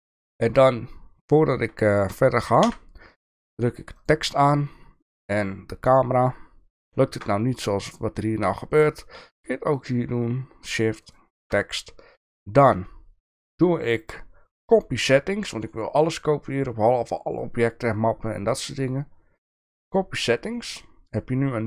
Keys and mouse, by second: 2.0 shift+middle click, 2.6 n, 3.9 click, 13.5-20.0 drag.